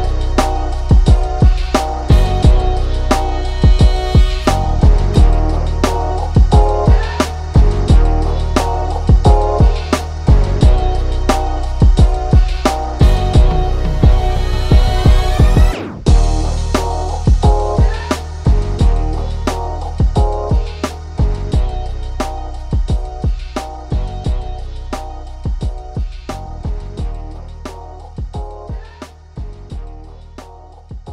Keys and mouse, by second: 0.9 right click, 1.5 click, 3.4 click, 5.7 right click, 6.1 click, 8.2-10.7 drag, 10.7 ctrl+z, 11.0 click, 11.5 ctrl+shift+], 12.3 click, 12.8 ctrl+shift+], 13.0 click, 14.9 shift+], 16.1-21.8 drag, 21.8 ctrl+z, 22.0-25.6 drag, 27.1 click, 28.5 ctrl+z, 28.8 click, 29.9 ctrl+shift+], 30.2 click.